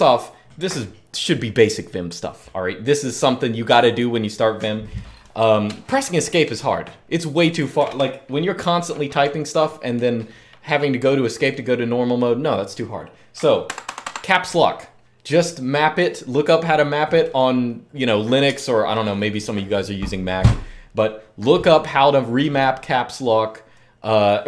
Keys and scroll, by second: 7.6 F4, 13.5 Escape, 13.7 Escape, 13.9 Escape.